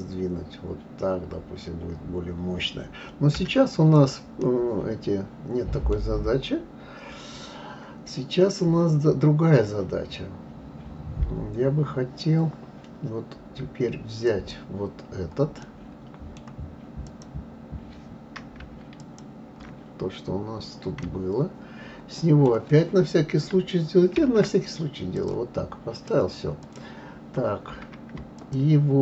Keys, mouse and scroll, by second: 4.0 click, 4.4-6.1 middle drag, 6.1-9.2 scroll down 2, 14.3 click, 15.6-17.1 middle drag, 17.1 click, 19.0 shift+click, 20.2-21.0 scroll up 4, 21.0-24.0 middle drag, 24.1 shift+d, 25.9 drag, 26.6 click, 28.4 shift+click.